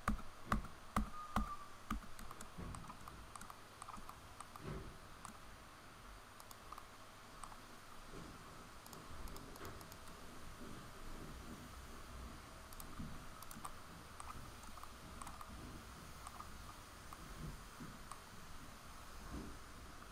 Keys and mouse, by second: 6.6-10.3 middle drag, 10.3 g, 12.8 r, 16.8 middle click, 17.5 middle click, 19.8 ctrl+r.